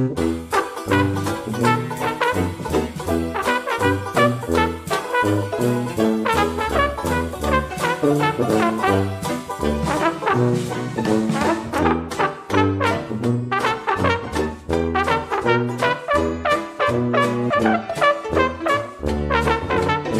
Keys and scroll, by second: 11.7 ctrl+d.